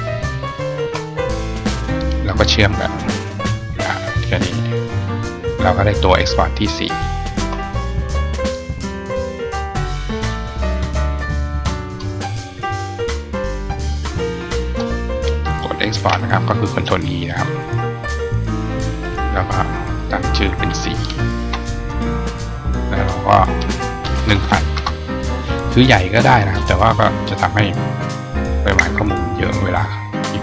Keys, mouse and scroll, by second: 0.5 shift+click, 2.7 click, 3.6 click, 4.5 click, 6.5 right click, 8.1 click, 8.4 click, 10.0 click, 10.8-11.8 drag, 12.5-14.2 drag, 26.3 click.